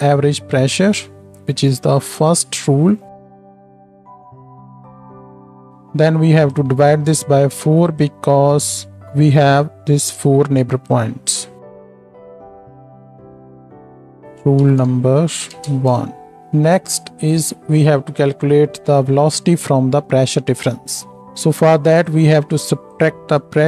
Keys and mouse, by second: 0.8 click, 3.1 shift+click, 3.1 shift+middle click, 3.1 shift+right click, 3.2 shift+d, 3.4 drag, 4.1 click, 4.2 shift+d, 4.9 click, 4.9 middle click, 4.9 right click, 5.1 ctrl+z, 6.5-8.6 shift+drag, 6.7 shift+d, 12.5 click, 13.3 ctrl+middle click, 13.3 ctrl+right click, 13.3 s, 13.7 ctrl+j, 14.1 F2, 17.3 click, 17.3 middle click, 17.3 right click, 20.1-23.6 drag, 20.1-23.6 middle drag, 20.1-23.6 right drag.